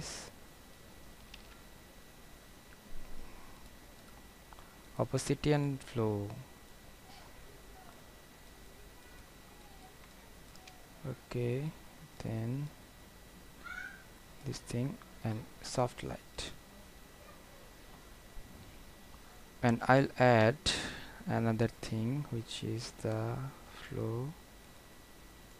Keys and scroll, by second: 1.5 ctrl+alt+z.